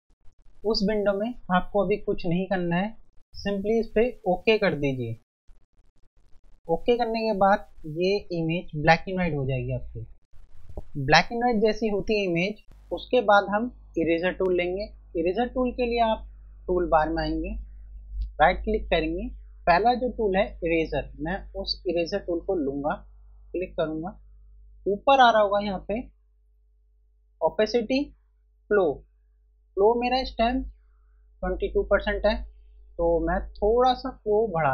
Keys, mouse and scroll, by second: 4.1 F1, 5.9 F1, 7.1 click, 15.1 F1, 18.1 right click, 23.0 click, 23.4 F1, 33.1 click.